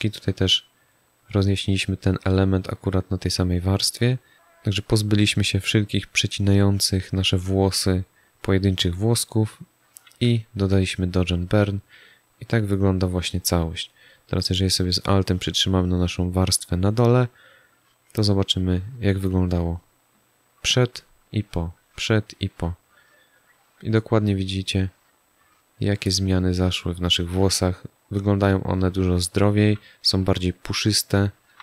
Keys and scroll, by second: 10.1 z.